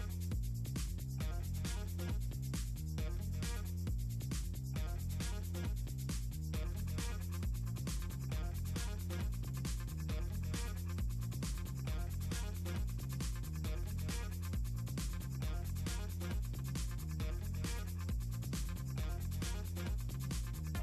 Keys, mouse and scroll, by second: 0.3 click, 0.7 shift+click, 1.6 ctrl+z, 2.0 ctrl+click, 2.5 middle click, 2.9-3.9 shift+drag, 4.6 shift+click, 5.7 shift+click, 6.6 click, 8.0 click, 9.3 click, 12.3 click, 14.4 Escape, 16.0 click, 17.1 click, 17.3 click, 17.8 shift+click, 18.1 middle click, 18.7 shift+click, 19.3 middle click, 19.9 click, 20.1-20.8 drag.